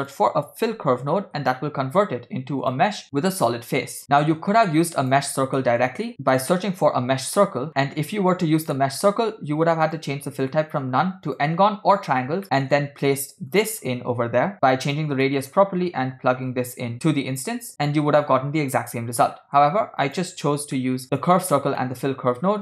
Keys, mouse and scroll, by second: 1.4 l, 4.3 click, 5.7 middle click, 6.2 shift+a, 7.8 middle click, 8.4-8.7 scroll down 3, 8.8 middle click, 9.9-11.5 drag, 12.6 middle click, 13.5-14.5 drag, 15.3 middle click, 15.8-16.5 scroll down 1, 16.5-17.7 drag, 19.4 middle click, 20.1 click, 20.5 x, 20.9 middle click, 21.2 click, 21.5 click, 21.9 middle click.